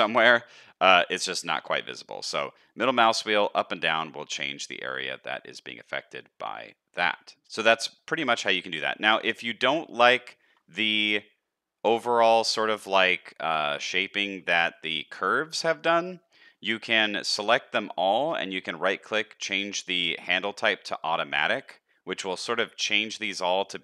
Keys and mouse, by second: 2.7-8.0 drag, 7.3 ctrl+z, 7.3 alt+a, 8.0 middle click, 8.5 shift+middle click, 8.9 middle click, 9.4 shift+middle click, 9.8 middle click, 10.2 shift+middle click, 12.7 shift+middle click, 15.1 a, 15.5 shift+middle click, 17.3 shift+middle click, 17.7 shift+middle click, 18.1-23.3 right drag, 23.4 shift+middle click.